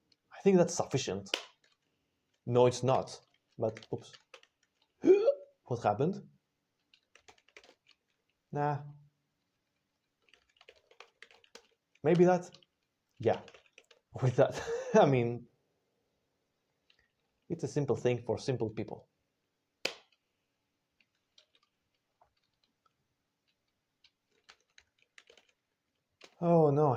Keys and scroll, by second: 1.2 Return, 2.1-4.2 typing, 3.1 alt+&, 7.2-8.0 typing, 9.2 alt+b, 9.4 alt+b, 9.5 alt+b, 9.7 alt+b, 10.3 alt+b, 10.4-11.6 typing, 12.0 Return, 13.3 ctrl+x, 13.5 o, 14.3 alt+n, 17.0 typing, 19.7 Return, 24.3-26.1 typing, 26.1 Return.